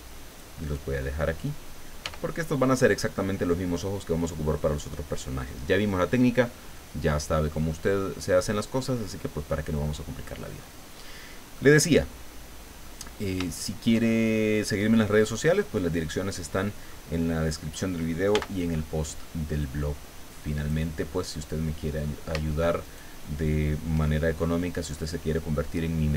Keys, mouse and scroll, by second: 0.3 click, 2.0 g, 2.7 click, 7.3-7.6 scroll down 1, 7.7-10.5 middle drag, 10.6 scroll up 1, 11.1-11.4 scroll down 1, 11.6-13.0 middle drag, 13.1 scroll down 1, 13.6 shift+middle click, 15.1-16.6 drag, 16.7 scroll down 2, 16.9 middle click, 18.3 b, 19.6-20.9 drag, 21.0-21.4 scroll down 1, 22.0 scroll up 1, 22.8 shift+right click.